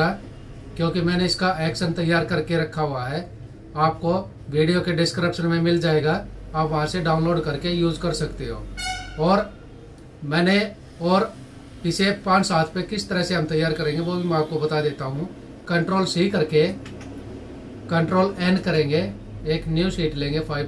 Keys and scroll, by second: 16.1 ctrl+c, 18.0 ctrl+n.